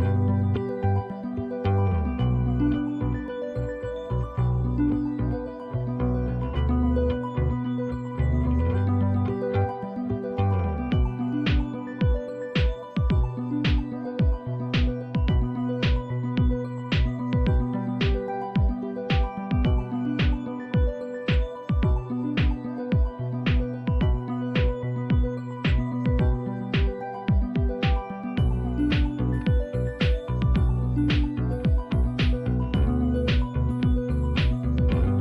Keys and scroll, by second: 3.6 typing, 5.4-10.4 typing, 12.6-15.1 typing, 16.5-20.4 typing, 22.1-24.6 typing, 29.1 Return.